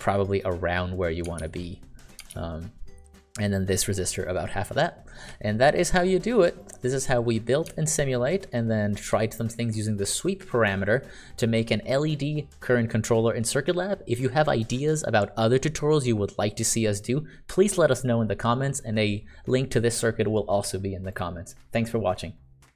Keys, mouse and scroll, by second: 1.8 ctrl+d, 2.7-5.5 ctrl+d, 7.0 click, 8.5 ctrl+click.